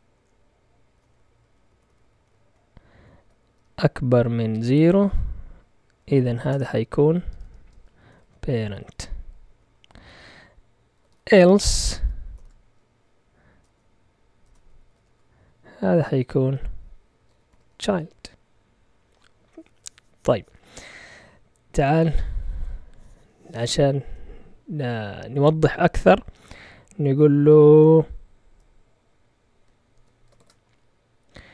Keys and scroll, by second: 0.1 Return, 1.4 Up, 1.6 Right, 1.8 Right, 2.0 Right, 2.1 Right, 2.3 Right, 2.4 Right, 3.5 >, 4.6 0, 6.0-12.3 typing, 13.6-18.3 typing, 20.9 Up, 21.6 Left, 29.9 Escape, 30.3 0.